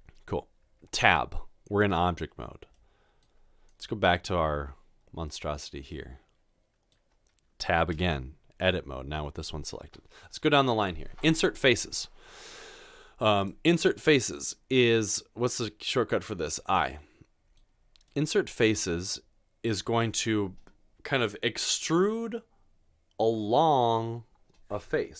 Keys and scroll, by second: 0.7 Tab, 8.0 Tab.